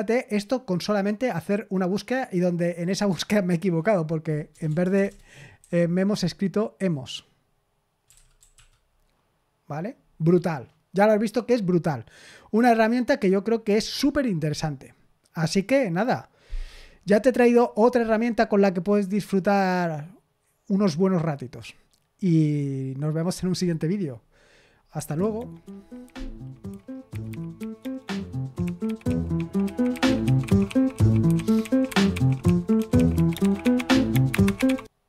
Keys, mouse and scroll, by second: 4.6-5.5 typing, 7.8-9.0 typing, 24.9 super+x.